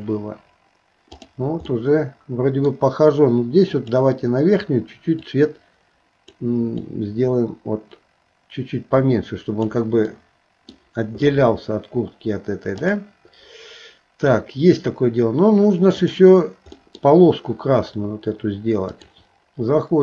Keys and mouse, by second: 0.0-1.3 drag, 1.7-2.7 middle drag, 3.8 click, 10.1 middle click, 12.8 click, 16.0 click, 16.8 middle click, 19.0-20.0 drag.